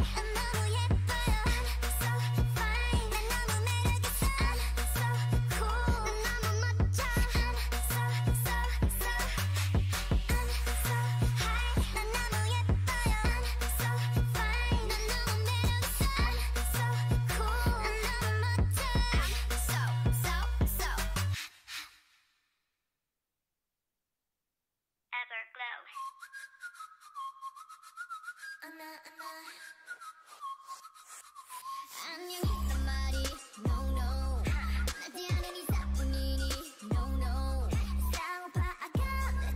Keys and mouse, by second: 1.4 Tab, 7.3 Tab, 8.6 click, 9.0 a, 9.4 ctrl+r, 10.2 ctrl+r, 10.8 ctrl+r, 11.7 ctrl+r, 12.3 ctrl+r, 12.5 click, 13.0 middle click, 13.4 ctrl+r, 13.9 ctrl+r, 15.1 ctrl+r, 15.7 ctrl+r, 16.2 a, 17.5-19.0 drag, 18.8 o, 19.2 g, 21.3-22.7 drag, 21.3-23.7 right drag, 23.4 shift+e, 24.9 g, 27.0 middle click, 28.0-29.3 drag, 29.3 right click, 29.9 g, 32.1-34.3 drag, 32.4 g, 34.3 o, 34.7 g, 36.2-37.6 drag, 39.0 g.